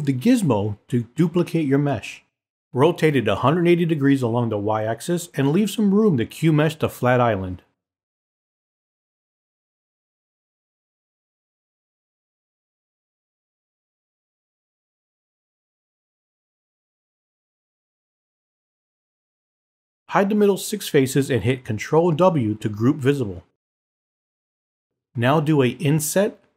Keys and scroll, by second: 18.1 w, 22.8 w.